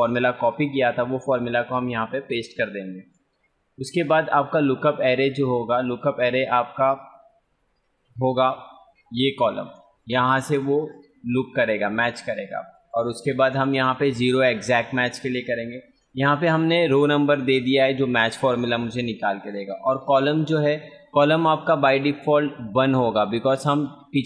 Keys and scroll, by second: 0.4 ctrl+v, 10.3 ctrl+space.